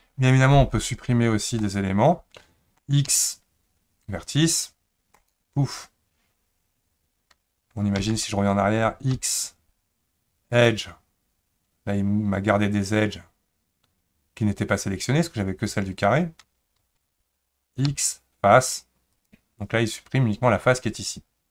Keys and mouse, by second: 1.6-2.8 middle drag, 3.1 x, 8.0 ctrl+z, 9.1 x, 16.8 ctrl+z, 17.9 x.